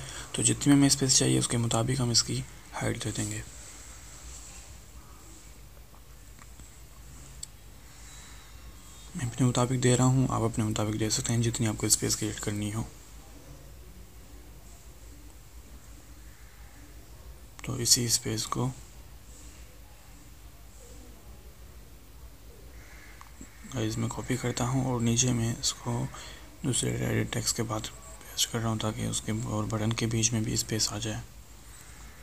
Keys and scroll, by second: 24.8 ctrl+c, 29.3 ctrl+v.